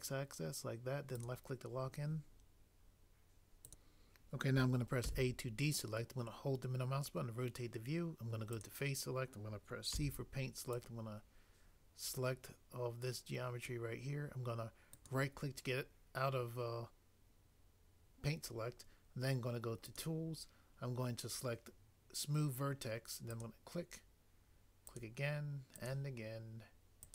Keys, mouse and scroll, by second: 1.2 click, 5.0 a, 10.0 c, 10.7 click, 15.0 click, 15.1 right click, 23.4 click, 24.9 click.